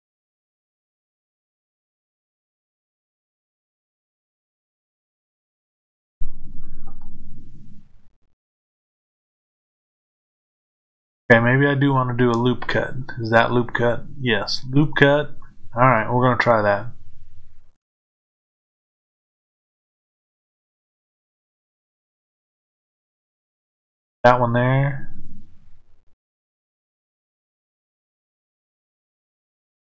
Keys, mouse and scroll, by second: 28.6 click.